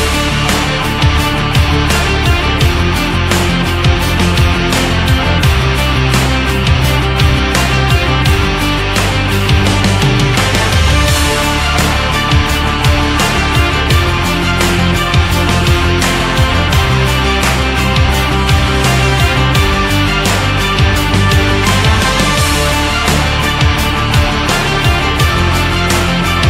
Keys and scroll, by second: 18.0 ctrl+z.